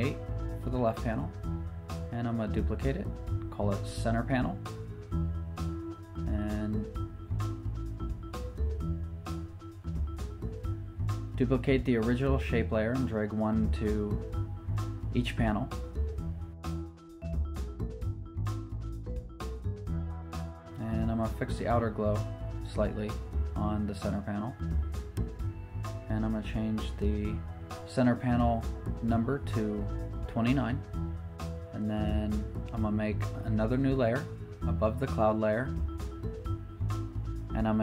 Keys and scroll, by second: 0.0-0.4 typing, 0.6 super+Return, 4.3-6.2 typing, 11.9 super+j, 14.2 super+j, 28.2 t, 29.6 9, 29.9 super+Return, 33.2 shift+super+n, 33.3 Return, 34.1 b.